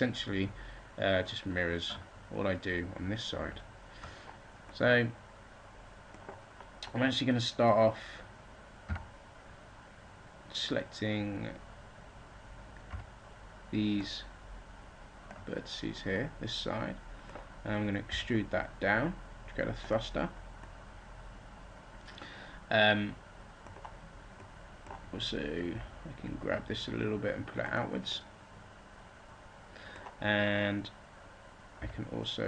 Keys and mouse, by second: 3.2 ctrl+z, 8.7 z, 12.0-13.0 drag, 12.8 b, 13.8-15.7 drag, 18.0 e, 20.5-21.7 drag, 25.6 g, 27.6-28.8 drag, 31.7 click, 31.7 e.